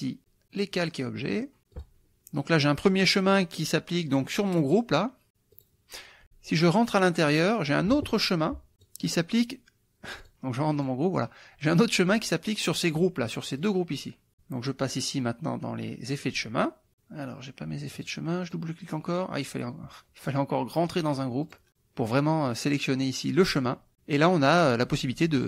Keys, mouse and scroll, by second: 0.2 click, 1.8 click, 4.5 click, 5.5 click, 7.2 click, 8.8 click, 10.2 click, 10.7 click, 13.6 click, 16.1 click, 17.9 click, 18.2 middle click, 18.5 click, 21.5 click, 24.5 click.